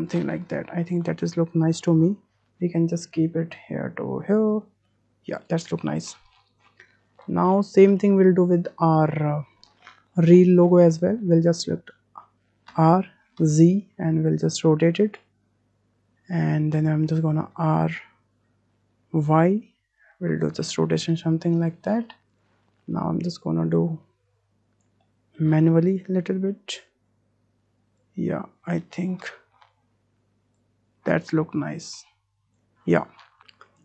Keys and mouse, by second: 2.7 w, 3.2-4.4 drag, 4.9 shift+click, 8.9 click, 12.7 r, 17.5 r, 22.3 click, 22.6 middle click, 23.7-24.8 drag, 24.8 middle click, 25.0-25.4 middle drag, 25.9-27.1 middle drag, 28.0-29.1 middle drag, 30.5-32.3 middle drag, 32.3 click.